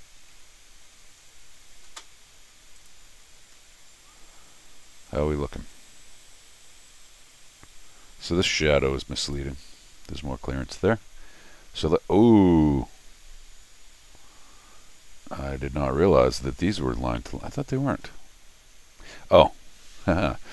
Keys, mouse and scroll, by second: 0.5 n, 1.2 middle click, 1.2 scroll up 2, 2.8 click, 3.5 middle click, 3.5-4.4 scroll, 4.0 middle click, 4.3 middle click, 4.9 middle click, 9.2 click, 15.5 middle click, 18.1 scroll down 1, 19.4 scroll down 1.